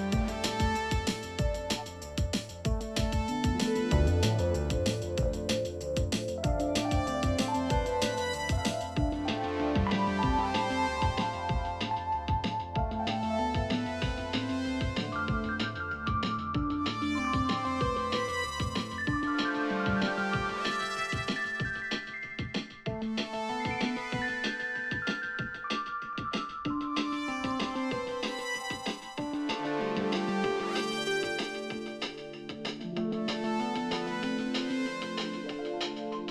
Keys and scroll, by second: 26.8-28.6 typing.